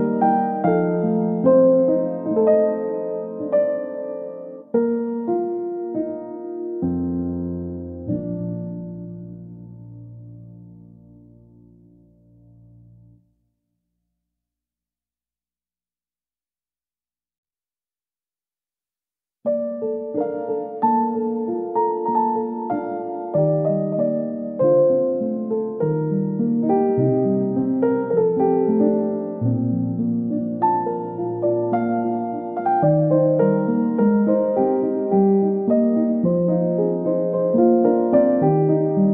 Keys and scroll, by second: 25.6 ctrl+c, 25.9 ctrl+shift+v.